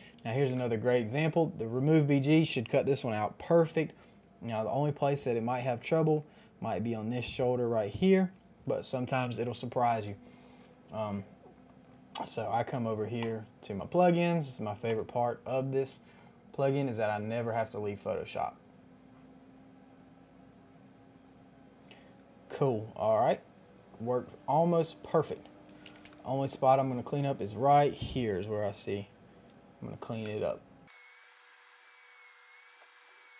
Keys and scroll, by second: 0.4 Return, 0.4 KP_5, 0.4 KP_0, 25.8 KP_2, 25.8 KP_5, 25.9 KP_0, 25.9 Return, 26.9 space, 30.2 p, 32.8 [, 33.1 [.